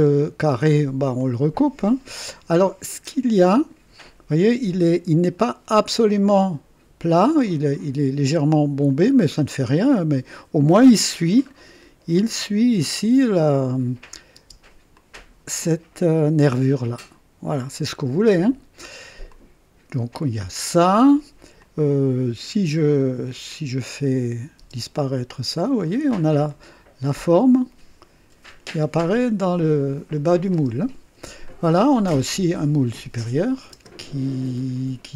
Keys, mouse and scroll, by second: 1.2-2.0 drag, 3.4 click, 5.4 scroll up 2, 6.0 right click, 7.4-8.3 drag, 9.1-9.6 scroll down 1, 9.7-11.3 drag, 11.4-11.8 scroll up 1, 14.0 click, 14.3 space, 14.4 space, 14.9-15.7 drag, 18.4-19.1 scroll down 3, 19.3-20.1 drag, 21.6 click, 23.5 click, 24.6 space, 25.8-26.2 scroll up 1, 26.5-29.8 drag, 30.5 space, 31.5 click, 33.3 click, 33.7 space.